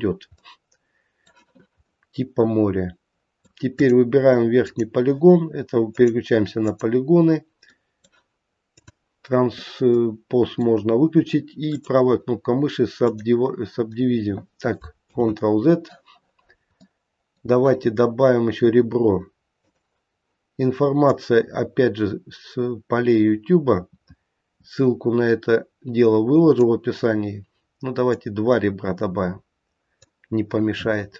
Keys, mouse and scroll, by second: 0.4 middle click, 1.9 middle click, 3.7 click, 4.7 click, 6.0 click, 6.7 click, 7.7 middle click, 8.8 click, 9.9 middle click, 11.6 right click, 15.0 ctrl+z, 16.4 scroll down 2, 16.7 middle click, 21.0 click, 28.1 click.